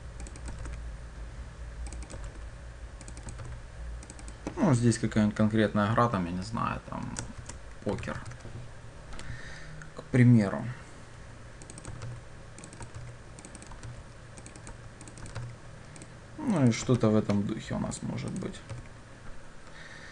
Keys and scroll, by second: 0.6 ctrl+v, 2.3 ctrl+c, 3.5 ctrl+v, 12.1 ctrl+c, 13.1 ctrl+v, 15.4 ctrl+c.